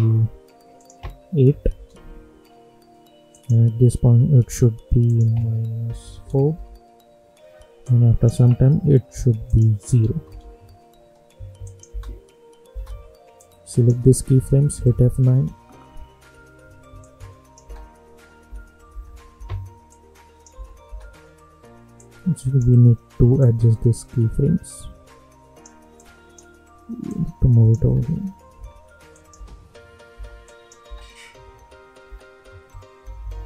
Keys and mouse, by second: 1.7 Return, 3.3 click, 5.8 -, 6.4 Return, 7.8-9.4 drag, 10.2 Return, 11.6 click, 11.8 space, 13.3 click, 14.7 F9, 16.9 click, 17.6 space, 19.8 click, 20.5 space, 21.9-27.8 drag, 27.8 space, 29.1 click, 29.3 space, 30.4 click, 30.8 space, 33.0 -, 33.2 -.